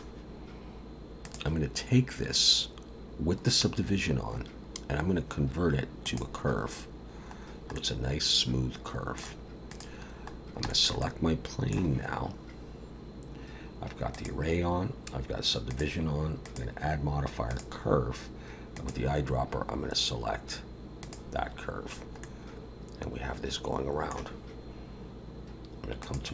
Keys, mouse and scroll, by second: 1.2 click, 7.4 scroll down 1, 7.7 middle click, 9.7 click, 10.4 scroll down 1, 10.7 shift+middle click, 11.0 middle click, 14.2 click, 15.7 click, 16.4 click, 18.7 click, 22.2 middle click, 26.0 click.